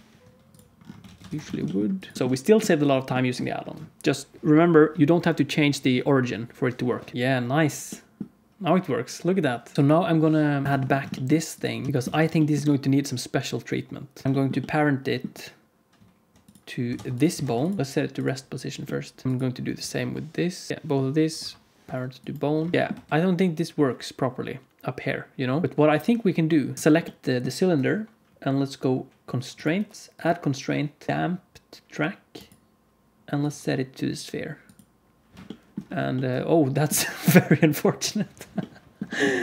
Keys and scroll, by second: 1.0 alt+a, 1.2 ctrl+s, 2.1 alt+z, 2.1 ctrl+s, 7.1 h, 7.1 space, 9.7 alt+shift+z, 9.7 alt+a, 9.7 ctrl+s, 9.7 space, 10.6 alt+h, 10.7 ctrl+s, 11.9 alt+z, 12.1 ctrl+s, 16.9 ctrl+Tab, 17.3 ctrl+Tab, 17.8 ctrl+p, 20.7 z, 21.3 ctrl+p, 22.7 ctrl+s, 22.7 alt+shift+z, 22.8 space, 26.7 alt+a, 26.7 ctrl+s.